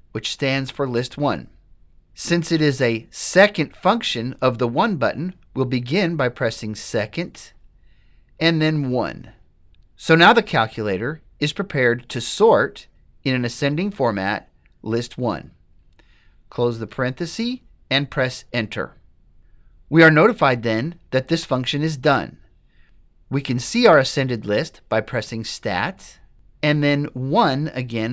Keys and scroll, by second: 8.9 1, 16.9 ), 18.6 Return.